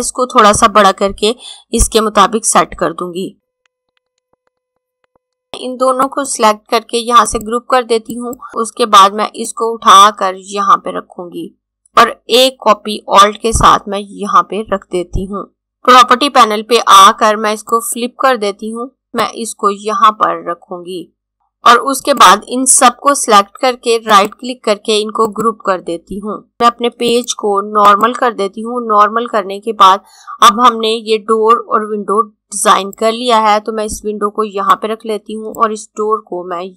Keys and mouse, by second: 4.5 click, 6.0 right click, 7.3 click, 9.5 click, 17.7 click, 19.3 click, 24.0 right click, 25.2 click, 32.8 click.